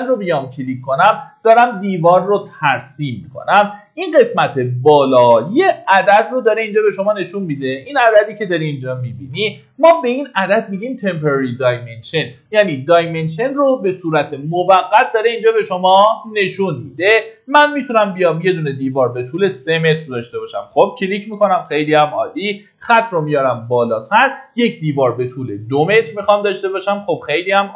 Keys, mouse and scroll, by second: 2.9-3.5 scroll up 1, 5.8 ctrl+shift+d, 20.4 click.